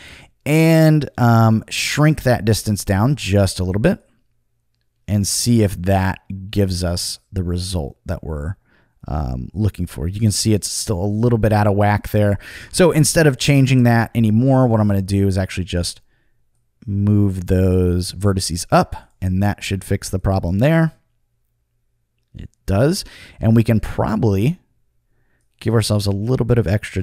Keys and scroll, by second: 11.4 super+z, 13.6 Return.